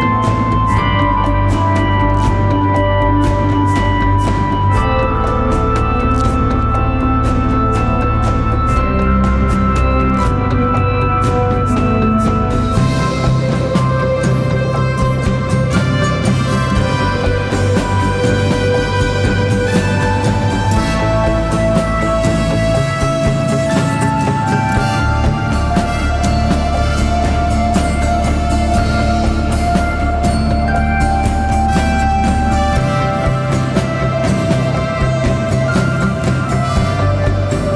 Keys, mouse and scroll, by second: 1.9 double click, 6.1 alt+Return, 7.4 ctrl+z, 9.5 ctrl+alt+Return, 14.4 alt+BackSpace, 16.8 ctrl+d, 18.0 ctrl+-, 18.3 ctrl+-, 18.5 ctrl+-, 19.5 ctrl+-, 20.9 alt+scroll up 1, 27.7 double click, 35.7 right click.